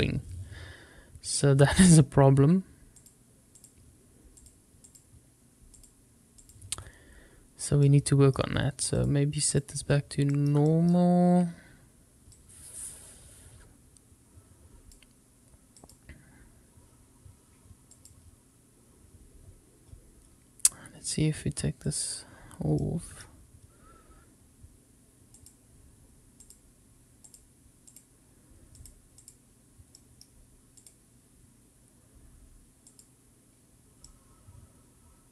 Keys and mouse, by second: 2.9 click, 3.5 click, 4.4 click, 4.8 click, 5.8 click, 7.8 middle click, 8.9-9.6 drag, 10.3 middle click, 10.7 shift+middle click, 12.3-15.0 drag, 15.7 click, 21.8 click, 22.8-23.2 middle drag, 25.3-26.5 drag, 27.3-28.0 drag, 28.7-29.3 drag, 30.8-33.0 drag, 34.0-35.3 middle drag.